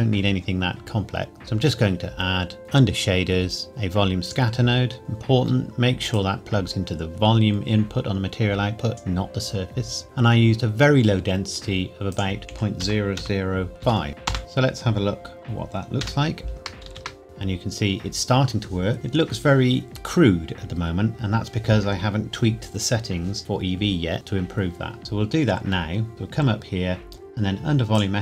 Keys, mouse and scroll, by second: 0.1-0.7 scroll up 1, 1.3 click, 4.3 click, 12.1 click, 12.5 KP_Decimal, 12.8 KP_0, 13.8 KP_5, 14.3 KP_Enter, 16.0 KP_0, 16.9 ctrl+s, 17.2-18.9 scroll up 2, 19.8-21.2 scroll up 2, 21.2 scroll up 1, 26.1 click, 27.9 click.